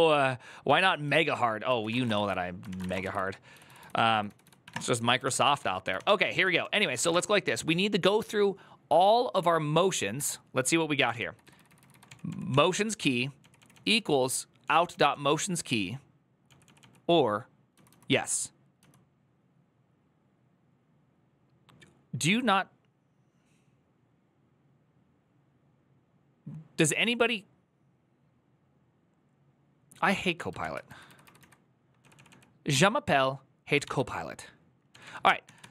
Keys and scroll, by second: 3.3-7.4 typing, 9.9 BackSpace, 11.1-14.2 typing, 31.6 typing, 35.0-35.7 typing.